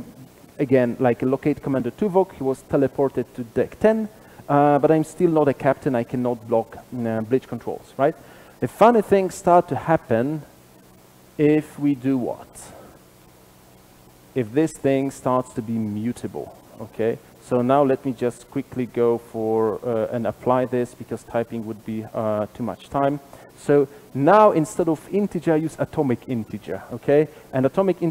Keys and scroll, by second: 22.7 shift+Escape.